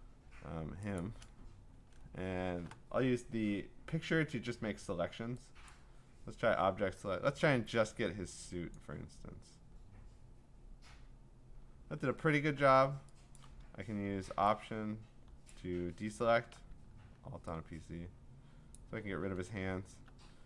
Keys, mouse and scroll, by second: 1.0 click, 2.0 middle click, 2.1 middle click, 2.8 scroll, 5.7 click, 8.7 click, 12.0-12.4 scroll, 13.4 click, 13.8 click, 15.5 alt+click, 15.8 alt+click, 18.7 alt+click.